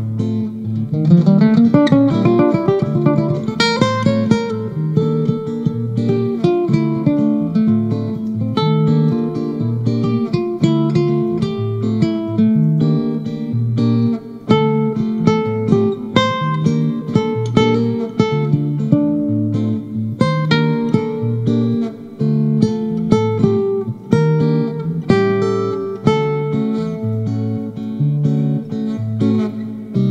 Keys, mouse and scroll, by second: 1.6 k, 2.2 l, 4.0-6.1 drag, 6.1-6.4 scroll up 4, 8.0 click, 8.3-9.1 scroll down 6, 9.7-11.2 scroll up 3, 11.2 click, 11.4-12.1 scroll down 7, 12.1-13.3 scroll up 3, 13.3-13.8 scroll up 1, 13.8 click, 15.6-17.0 scroll up 4, 17.0-18.3 drag, 18.3-18.6 scroll up 2, 21.4-21.9 scroll up 1, 21.9-23.8 scroll up 2, 23.8 click, 24.1-25.4 scroll down 11, 25.4-26.1 scroll down 5, 26.7 click, 26.9-27.5 scroll up 4, 27.5 middle click, 27.5 scroll, 27.9 t, 28.8-30.1 drag.